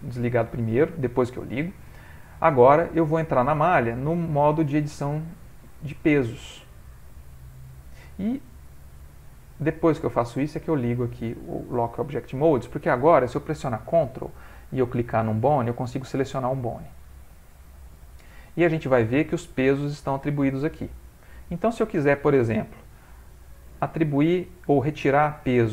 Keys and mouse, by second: 2.2 middle click, 3.7 click, 10.0 click, 14.7 ctrl+click, 16.0 ctrl+click, 18.0 ctrl+click, 19.5 ctrl+click, 21.7 ctrl+click, 22.7 middle click, 23.3 ctrl+middle click, 24.5 middle click, 24.6 middle click, 24.7 ctrl+middle click.